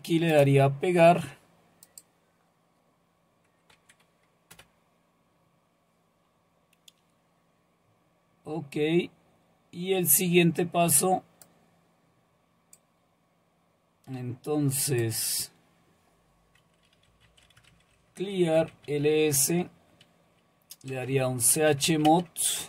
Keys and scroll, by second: 3.7 Right, 16.8-19.1 typing, 20.7-22.4 typing.